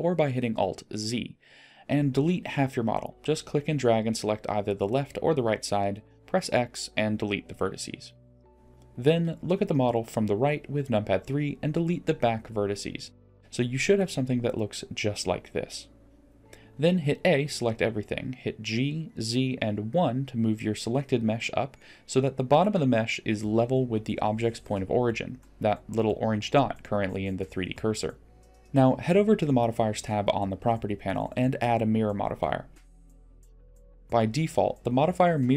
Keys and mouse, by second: 0.3 click, 1.1 click, 4.9 x, 9.3 KP_3, 10.9 click, 11.8 x, 13.8-17.5 middle drag, 19.0 a, 20.6 g, 22.6 g, 26.4 middle click, 28.7 ctrl+z, 28.7 g, 29.4-30.0 middle drag, 30.3 middle click, 31.7 click, 34.8-35.5 middle drag.